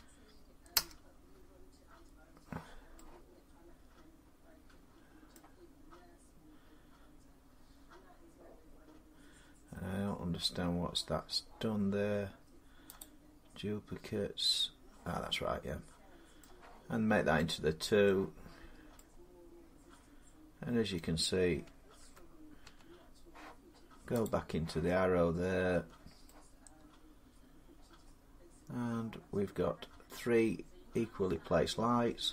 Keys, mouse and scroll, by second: 0.0-0.2 typing, 0.6 Return, 3.2 4, 5.1-10.2 middle drag, 12.8-16.2 drag, 16.2 middle click, 17.9-18.9 middle click, 18.3-18.9 scroll down 5, 20.8 middle click, 21.8 Tab, 21.8 scroll up 5, 22.5 Tab, 24.1 click, 25.6 Tab, 27.8-29.1 drag, 32.1 middle click.